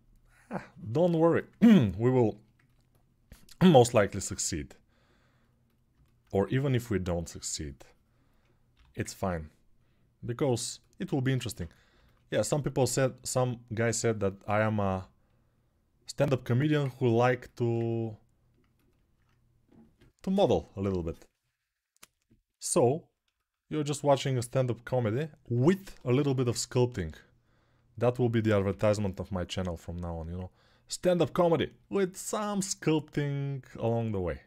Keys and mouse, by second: 3.5 g, 8.5 g, 11.5-23.7 alt+shift+drag, 14.7 g, 23.7 alt+right click, 23.9-34.4 ctrl+alt+shift+drag, 25.3-26.7 typing, 28.5 p, 28.6 [.